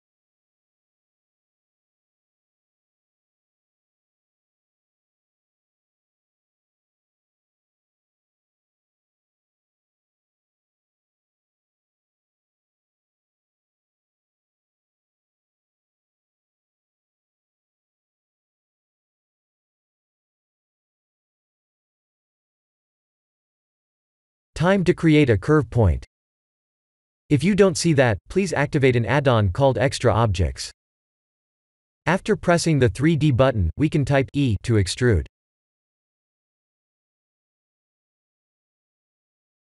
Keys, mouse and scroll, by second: 0.7 KP_3, 6.2 shift+click, 6.9 shift+click, 7.5 Tab, 8.3 alt+a, 11.8 click, 13.8 middle click, 16.1 click, 16.7 click, 17.2 click, 18.1 middle click, 18.6 Tab, 19.0 click, 19.5 shift+click, 19.9 shift+click, 20.3 x, 20.9 middle click, 22.0 click, 22.3-23.1 scroll down 6, 23.1 KP_1, 23.6-25.0 scroll down 7, 25.2 click, 25.5 shift+a, 29.4 click, 29.8 shift+middle click, 31.3 g, 32.8 s, 36.1 ctrl+z, 37.0 e, 39.3 e.